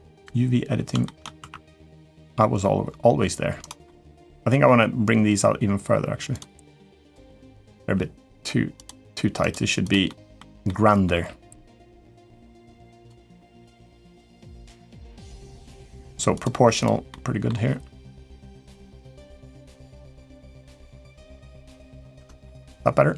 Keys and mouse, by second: 0.0 Escape, 0.0 ctrl+Tab, 0.8 shift+middle click, 1.1 1, 1.5 click, 1.8 g, 3.6 middle click, 4.1 g, 6.8 click, 7.1 middle click, 7.6 g, 9.2 click, 9.6 click, 9.8 middle click, 10.4 middle click, 10.9 g, 13.0 middle click, 14.7 g, 16.5 click, 16.9 middle click, 17.5 g, 19.4 click, 19.6 g, 21.0 middle click, 21.9 Tab, 22.2 middle click.